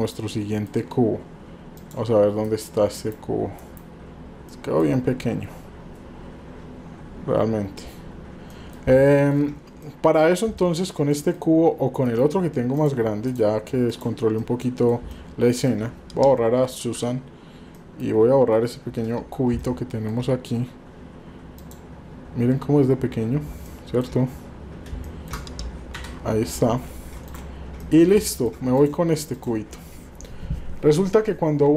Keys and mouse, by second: 1.8 drag, 2.4 KP_Divide, 2.9 KP_Divide, 4.6 middle click, 8.7 middle click, 9.0-9.4 shift+middle drag, 9.9 middle click, 10.6 shift+middle click, 11.2 middle click, 12.0 KP_Divide, 12.7 click, 13.3 click, 14.0 drag, 14.5-14.9 middle drag, 15.1-15.7 shift+middle drag, 16.9 Delete, 17.7-18.1 middle drag, 19.6-20.1 shift+middle drag, 21.6 click, 23.8 shift+middle drag, 25.2 shift+middle click, 25.9 Delete, 27.3 click, 27.9 middle drag, 28.3 middle drag.